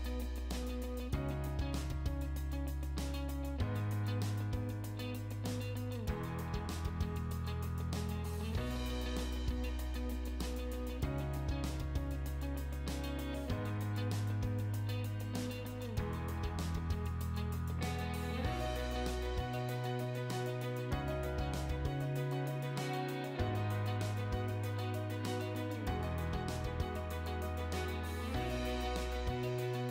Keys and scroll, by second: 0.8 shift+2, 20.6 1, 21.8 ., 22.2 5, 23.3 ', 27.0 7, 27.7 ', 29.0 Return.